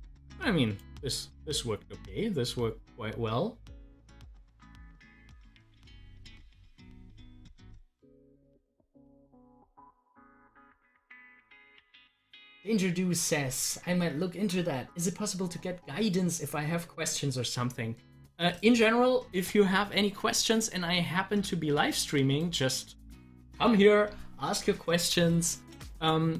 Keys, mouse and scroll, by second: 1.1 scroll down 1, 8.4 scroll down 1, 20.5 click, 20.9 scroll up 1, 22.7 space, 25.8 scroll down 1.